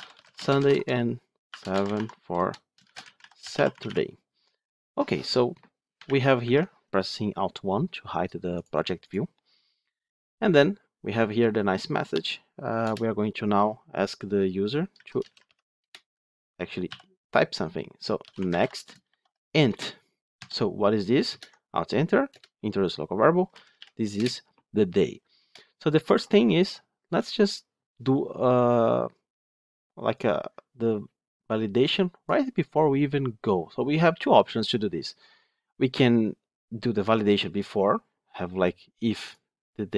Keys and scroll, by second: 5.9 alt+1, 15.7 Return, 21.2 alt+Return.